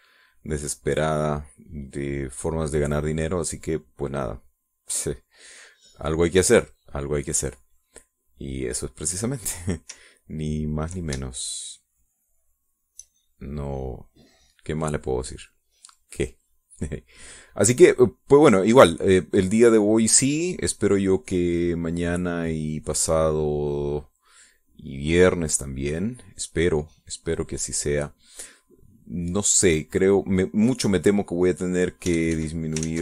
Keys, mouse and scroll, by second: 0.2-1.5 middle drag, 4.5 middle click, 5.2 middle click, 5.8 middle click, 11.4 ctrl+click, 12.1-13.9 shift+drag, 14.1-15.8 shift+drag, 15.9-17.0 drag, 17.4 click, 18.2-19.3 drag, 19.6 click, 20.6-21.9 drag, 22.6 click, 23.9 click, 25.3 click, 26.5-27.7 drag, 27.9 click, 29.3 click, 30.0 click, 30.5 click, 31.8 click, 32.9 ctrl+z.